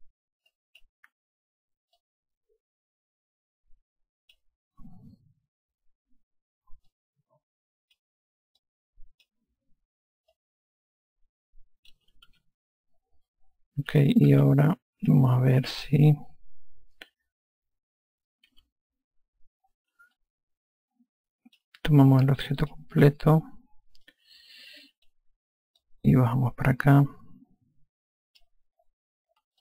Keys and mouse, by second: 0.9 click, 2.3 click, 7.3 click, 9.0 click, 10.7 click, 12.7 F1, 14.7 F2, 16.7 F4, 18.9 F1, 20.5 alt+click, 23.0 click, 24.4 alt+click, 26.2 click.